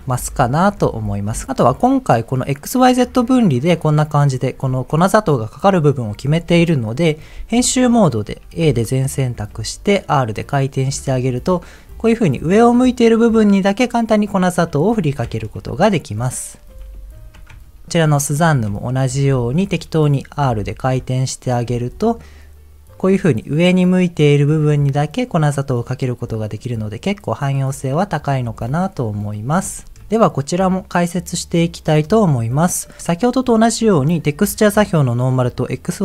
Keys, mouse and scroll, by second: 0.1 m, 0.8 m, 1.3 m, 7.3 Tab, 8.6 a, 9.5 r, 10.7 click, 11.0 Tab, 11.9 middle click, 12.9-14.3 middle drag, 14.6 middle click, 16.7 ctrl+z, 16.9 ctrl+z, 17.7 Tab, 18.1 shift+middle click, 18.5 middle click, 19.5 Tab, 19.6 middle click, 20.5 r, 21.4 click, 21.7 Tab, 21.9 middle click, 25.7 middle click, 27.0 middle click, 27.7 middle click, 28.4 middle click, 30.0 ctrl+z, 31.7-32.3 scroll up 4, 32.7 middle click.